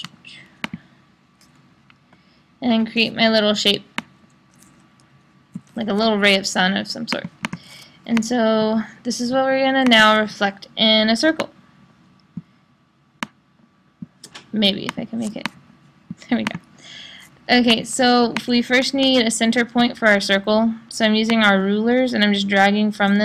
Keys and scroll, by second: 1.7 Up.